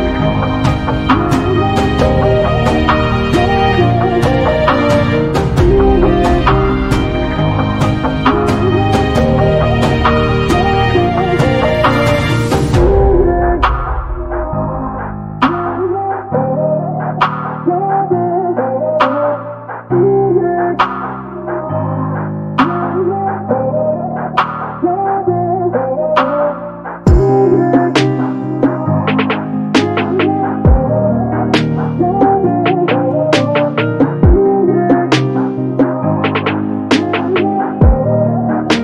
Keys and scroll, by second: 21.4 q, 21.8 space, 23.3 q, 25.3 9, 25.6 0, 26.1 Return, 29.3 m, 36.9 space.